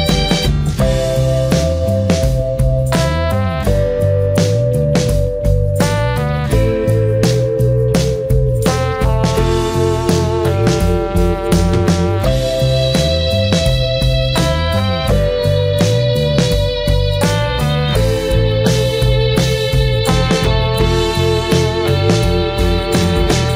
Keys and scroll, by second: 22.3 ctrl+j.